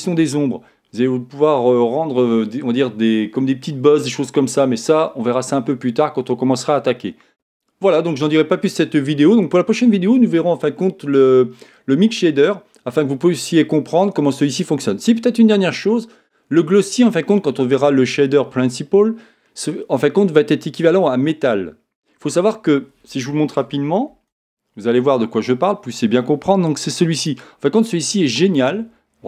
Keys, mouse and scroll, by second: 29.1-29.2 middle drag.